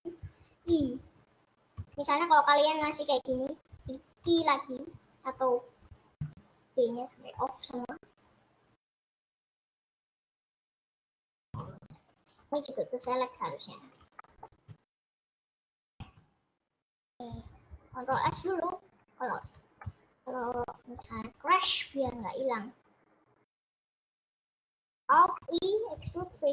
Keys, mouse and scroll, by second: 11.0-12.8 middle drag, 12.8 scroll up 1, 14.3 middle click, 15.4-19.4 middle drag, 19.9-21.2 middle drag, 21.2 scroll down 2, 21.4 middle click, 26.1 alt+e.